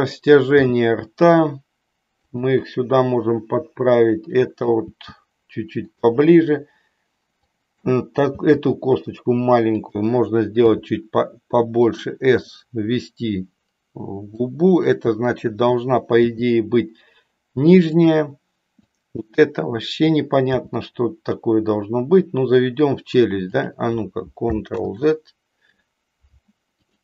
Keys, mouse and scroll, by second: 0.4 g, 2.3 click, 4.1 click, 5.0 g, 5.9 click, 7.5 click, 8.3 g, 9.9 click, 10.7 s, 11.9 click, 14.4 click, 16.3 g, 18.9 click, 20.7 g, 24.8 ctrl+z, 26.8 click.